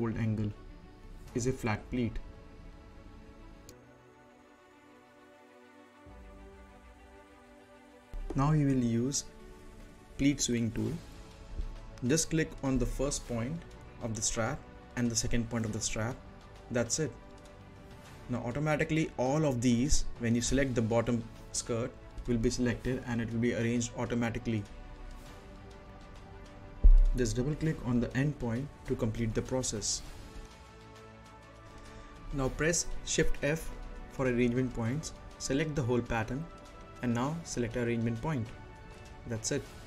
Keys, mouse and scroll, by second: 1.3-1.8 scroll up 1, 1.8 middle click, 2.7 scroll down 1, 3.0 middle click, 8.4 click, 13.3 click, 22.2 click, 23.4 scroll up 1, 25.1 click, 26.0-26.6 scroll down 1, 26.6-30.2 right drag, 30.2 click, 31.0 scroll down 1, 31.1 middle click, 31.7 click, 32.0 right click, 33.0 shift+f, 34.4 click, 35.1 right click, 35.5 scroll down 1, 37.5 click.